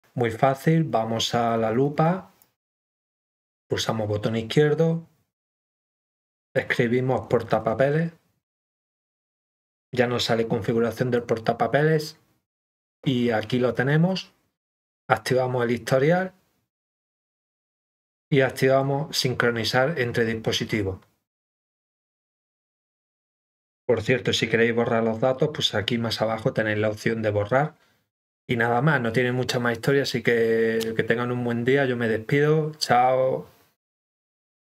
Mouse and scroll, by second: 2.4 click, 6.4 click, 10.9 click, 14.7 click, 18.1 click.